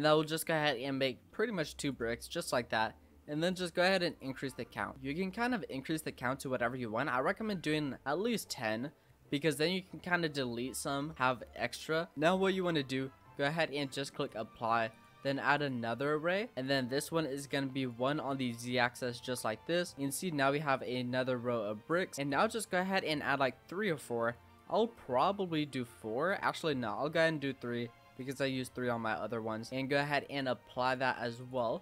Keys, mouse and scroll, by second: 0.3-4.5 drag, 4.5-4.9 scroll down 3, 4.9-6.7 middle drag, 8.0-9.1 drag, 9.1-9.7 scroll down 4, 9.7-10.6 scroll up 2, 10.6-11.1 scroll up 3, 11.1 shift+middle click, 11.9 scroll up 2, 13.4-14.9 drag, 15.7-17.9 drag, 18.3-19.9 drag, 20.7-24.2 drag, 24.2-24.9 right drag, 24.9-25.2 middle drag, 25.2-25.8 scroll down 6, 25.8 scroll up 1, 26.0-26.4 middle drag, 26.4-27.1 scroll up 4, 28.4 click, 29.1 middle click, 29.4-30.4 scroll up 2, 30.4-31.5 drag.